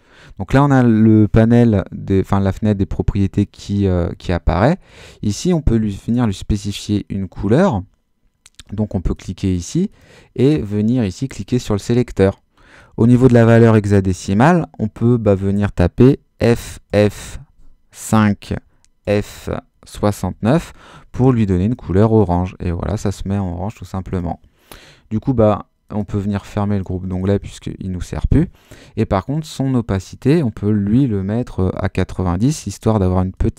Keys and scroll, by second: 16.4 f, 18.1-20.9 typing, 21.6 Return, 31.3-32.1 typing.